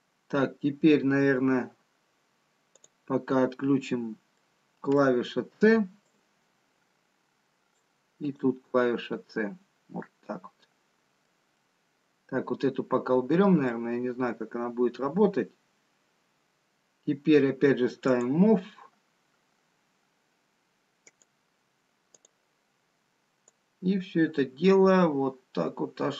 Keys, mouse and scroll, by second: 3.2 click, 4.3 scroll up 2, 6.0 middle click, 6.0 c, 22.8 click, 24.2 click.